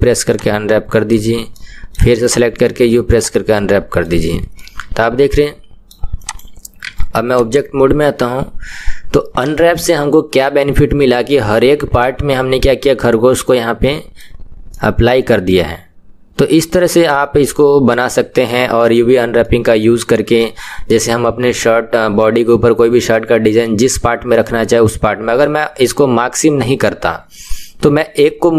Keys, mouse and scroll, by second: 0.5 u, 1.6 middle click, 2.3 click, 3.2 u, 3.7-6.4 middle drag, 6.4 click, 6.9 Tab, 7.4 click, 7.6-10.6 middle drag, 12.4-17.7 middle drag, 19.4-28.5 middle drag.